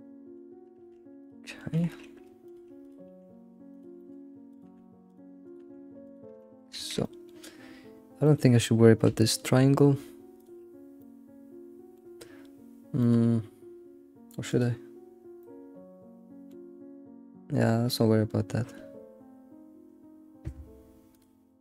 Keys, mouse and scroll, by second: 0.5 scroll up 3, 0.8 Tab, 0.9 Tab, 1.2 click, 1.4 middle click, 1.7 g, 1.7 g, 2.8 click, 3.1 g, 4.0 middle click, 4.5 click, 4.7 g, 5.4 click, 5.6 g, 6.4 middle click, 6.7 ctrl+s, 6.9 scroll down 1, 7.0-8.6 middle drag, 8.6-9.2 scroll up 2, 9.2-10.4 shift+middle drag, 10.4 click, 10.9 scroll, 11.0-12.0 middle drag, 12.0 scroll down 2, 12.8 scroll down 1, 13.0-14.5 middle drag, 14.5 click, 15.4 middle click, 16.0-18.4 middle drag, 21.1 click.